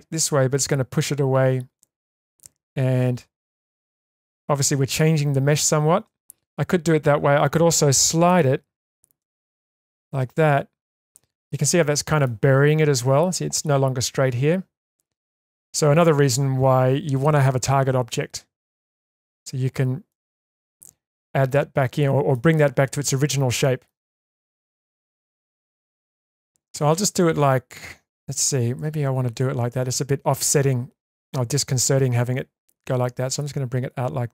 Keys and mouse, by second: 1.7 middle click, 3.2 shift+middle click, 6.2 ctrl+z, 6.9 middle click, 8.4 middle click, 9.2 g, 11.1 shift+middle click, 11.6 middle click, 14.9-16.0 middle drag, 20.1-22.3 middle drag, 23.6 shift+middle click, 24.1-28.3 middle drag, 28.8 ctrl+z, 31.1 middle click, 33.1-34.3 drag.